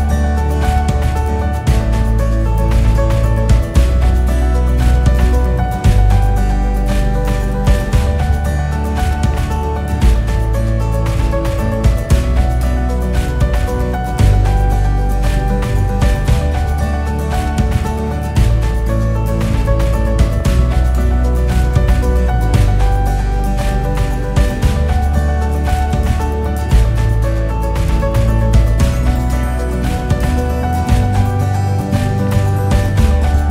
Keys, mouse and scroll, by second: 2.7-3.5 KP_6, 3.7 KP_6, 3.8-5.3 KP_6, 5.8 KP_1, 7.4-8.9 drag, 9.2 click, 9.5 KP_4, 9.7 KP_4, 9.9 click, 10.7 KP_1, 11.5 e, 15.3 KP_8, 15.8 click, 16.4 KP_1, 17.3 e, 24.7 KP_8, 25.1-26.3 drag, 26.3 ctrl+r, 31.2-32.5 typing.